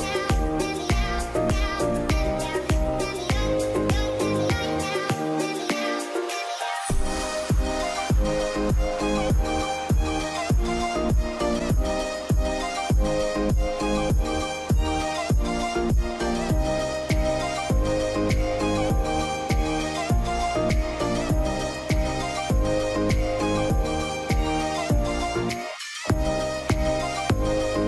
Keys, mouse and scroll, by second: 0.6 shift+click, 3.4 double click, 3.7 middle click, 9.2 scroll down 1, 9.4 middle click, 10.9 g, 11.7 g, 14.7 ctrl+g, 14.8-16.3 scroll up 1, 16.3 scroll up 1, 16.5 double click, 17.1 ctrl+g, 18.6 middle click, 19.4 t, 19.7 z, 20.0-20.6 scroll down 1, 20.6 middle click, 20.9-22.1 scroll up 1.